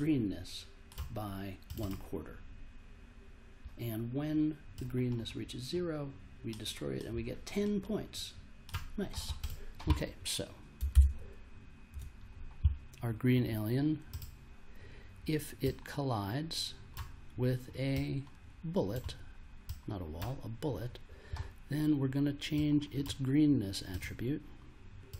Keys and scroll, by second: 10.9 super+Tab.